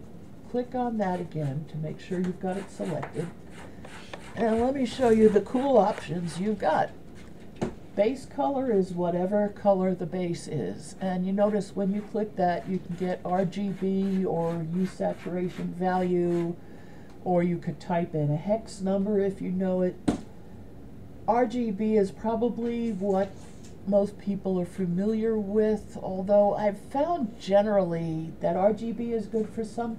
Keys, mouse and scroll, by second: 0.1 right click, 10.9 click.